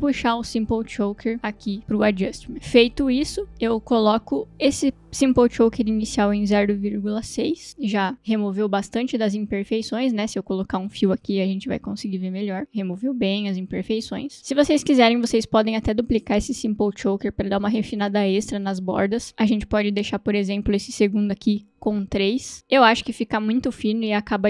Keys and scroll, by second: 0.0-1.5 typing, 0.1 ctrl+space, 6.6 ,, 7.3 6, 7.4 Return, 11.5-12.5 typing, 17.5 ctrl+d, 22.6 Return.